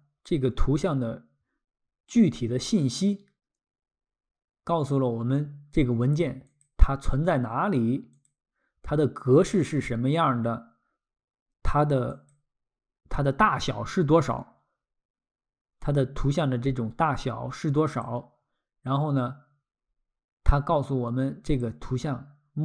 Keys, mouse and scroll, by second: 6.5 click, 8.3 click, 12.1 click, 17.9 click, 21.5 click.